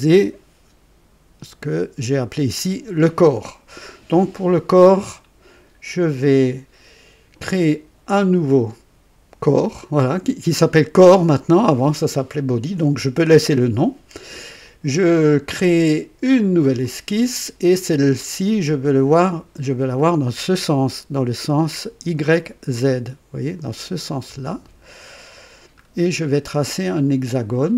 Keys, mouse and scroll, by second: 9.5 click, 16.8 click, 24.4 click, 25.8-26.3 scroll up 4.